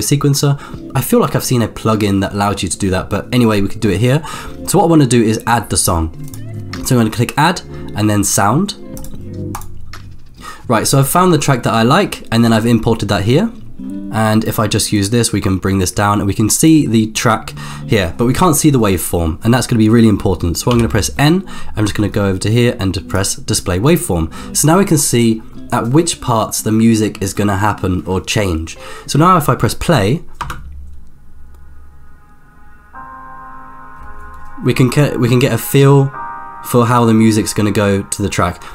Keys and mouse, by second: 0.0 click, 6.3-9.1 drag, 14.9-16.7 drag, 17.2 middle click, 17.9 middle click, 20.7 n, 23.1 click, 30.5 space.